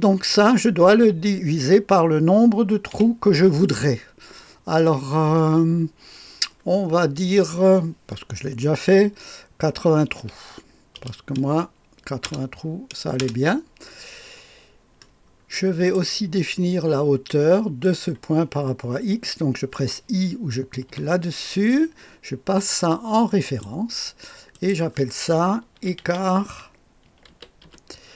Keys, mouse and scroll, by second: 2.9 KP_Divide, 10.1 KP_8, 10.9 KP_0, 12.2 Return, 13.1 Return, 15.0-16.0 scroll up 1, 15.5 middle click, 16.0 right click, 17.8 click, 20.9 i, 23.4 click, 23.6 typing, 24.5 middle click, 24.7 click, 25.5-28.1 typing.